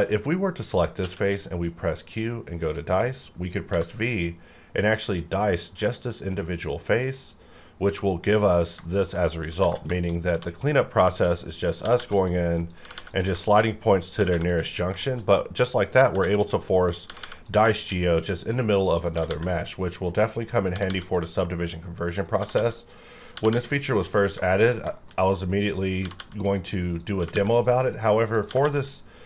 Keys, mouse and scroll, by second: 1.0 q, 2.6 click, 3.7 v, 4.2-5.7 scroll down 1, 5.7-7.0 scroll up 1, 7.0 click, 8.8 shift+middle click, 9.5 alt+a, 9.9 shift+middle click, 10.2 shift+scroll up 1, 10.3 1, 11.1 shift+middle click, 11.3-11.6 shift+scroll up 1, 11.6 click, 11.8 g, 12.0 g, 12.2 click, 12.8 g, 12.9 g, 13.1 click, 13.4 shift+middle click, 13.6 shift+scroll up 2, 14.1 click, 14.2 g, 14.3 g, 14.5 click, 14.8 scroll down 1, 15.0 shift+middle click, 15.2-15.9 shift+scroll up 2, 15.9 click, 16.0 g, 16.2 g, 16.4 click, 17.1 g, 17.2 g, 17.4 click, 17.7 shift+middle click, 19.0 click, 19.1 g, 19.3 g, 19.4 click, 20.7 g, 20.9 g, 21.0 click, 22.4 g, 22.5 g, 22.8 click, 23.3 g, 23.5 g, 23.6 click, 24.4 shift+middle click, 24.6-24.9 shift+scroll down 2, 24.9 shift+middle click, 25.9 click, 26.0 g, 26.2 g, 26.4 click, 27.2 g, 27.3 g, 27.5 click, 28.5 g, 28.6 g, 28.8 click, 29.1 scroll down 1.